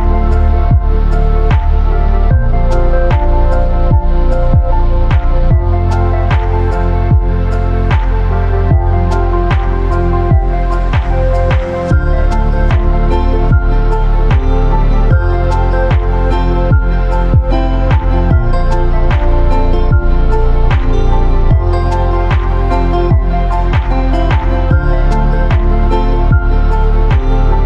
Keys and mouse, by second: 3.2 space, 4.5 click, 4.5 typing, 4.9-5.4 drag, 6.5 click, 7.0 shift+drag, 12.2 Tab, 13.9 a, 15.6 Tab, 18.9-19.7 drag, 20.1 Tab, 21.6 a, 22.3 p, 24.1 Tab, 25.6-25.9 typing.